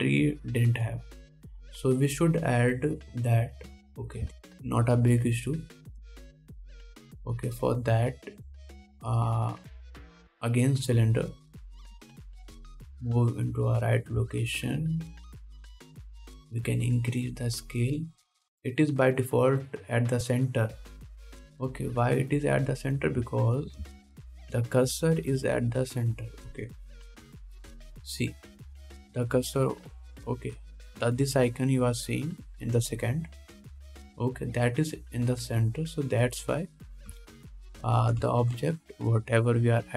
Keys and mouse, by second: 2.9-4.9 middle drag, 5.6 shift+a, 7.0 middle click, 7.3 shift+s, 8.3 shift+a, 9.8 shift+a, 12.2 s, 13.1 g, 15.2-28.5 shift+drag, 17.3 s, 23.1 x, 28.6 ctrl+KP_7, 38.9-39.9 shift+drag, 39.6 shift+a.